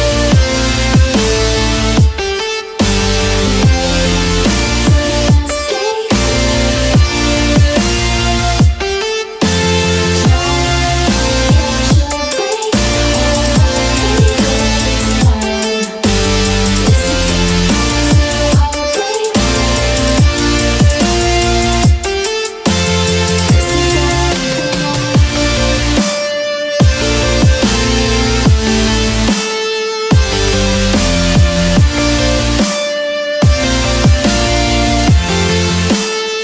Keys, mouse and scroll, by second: 8.5 ctrl+shift+j, 10.2-10.7 ctrl+scroll down 4, 12.5 click, 13.0 right click, 14.8 click, 16.5 click, 17.2 click, 19.1 1, 22.1 click, 22.5 click, 23.1 click, 26.5-29.8 ctrl+shift+drag, 35.2 ctrl+shift+click, 36.3 ctrl+shift+j.